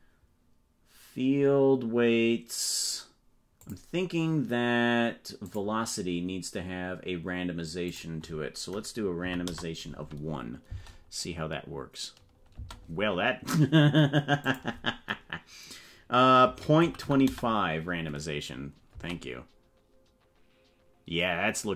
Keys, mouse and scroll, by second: 3.5 click, 5.4 click, 8.0-10.0 drag, 10.6 space, 12.6 space, 14.4-18.0 drag, 18.9 space.